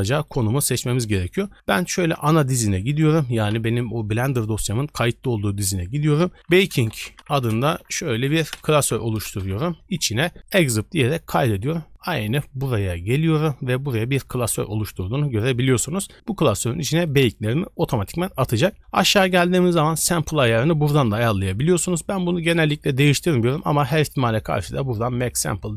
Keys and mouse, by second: 23.4 middle click.